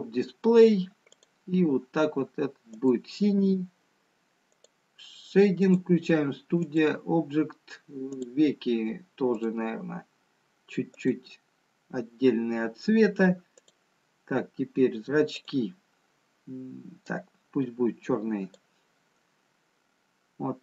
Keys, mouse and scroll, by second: 0.7-2.2 scroll down 5, 2.2 click, 10.8 click, 13.7 click, 15.9 click, 20.5-20.6 scroll up 2.